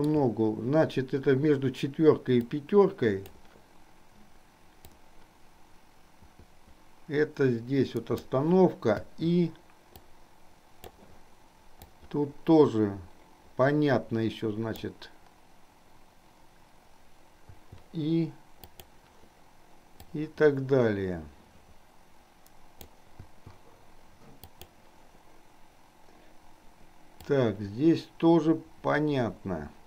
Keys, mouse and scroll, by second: 2.6 click, 5.0-8.6 drag, 10.4 click, 12.1-15.1 drag, 17.7 i, 18.9 click, 20.4-23.1 drag, 23.5 i, 24.6 click, 27.5-29.8 drag.